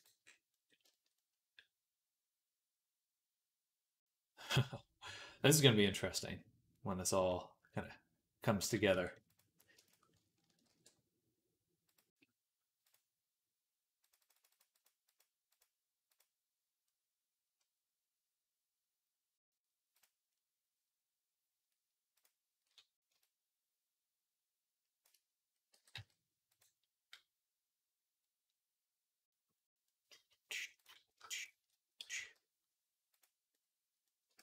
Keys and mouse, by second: 0.7-9.2 shift+middle drag, 8.8 Tab, 9.2 click, 9.6 shift+middle click, 9.7 click, 9.8 ctrl+middle click, 10.5 ctrl+b, 12.7-26.4 drag, 25.6 g, 26.4-30.6 middle drag, 30.6 click, 31.0 shift+middle click, 31.2 shift+click, 31.5-34.4 middle drag, 31.8 g, 34.2 ctrl+z.